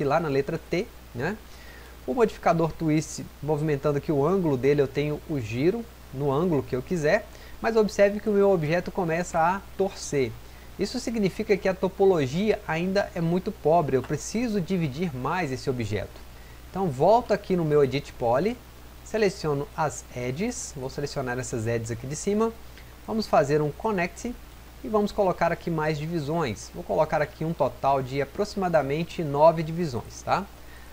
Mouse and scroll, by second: 8.3-9.2 drag.